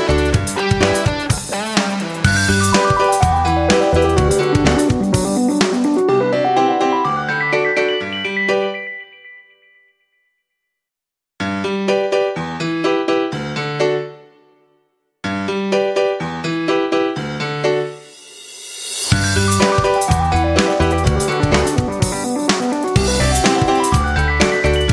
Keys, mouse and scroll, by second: 2.3-16.2 shift+drag, 16.8 click, 19.0 ctrl+g, 19.7 shift+click, 20.4 shift+click, 21.8 click, 22.5 ctrl+g, 23.5-24.9 drag.